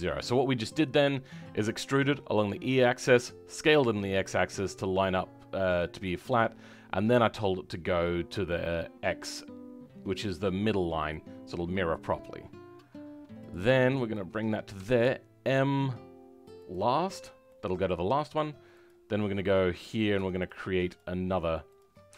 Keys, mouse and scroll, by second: 11.0 middle click, 13.4 click, 17.5 middle click, 18.8 click.